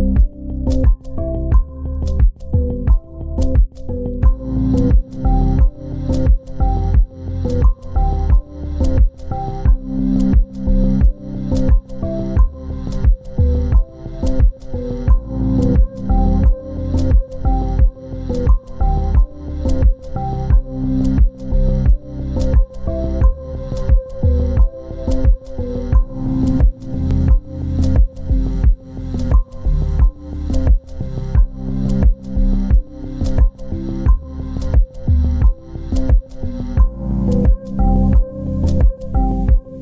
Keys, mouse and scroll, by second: 2.8 scroll up 1, 3.4-5.3 scroll down 1, 5.3 double click, 6.3 scroll up 1, 13.3 scroll down 1, 19.1 scroll up 1, 28.3-29.3 scroll down 1, 34.8 double click, 37.3 scroll up 1.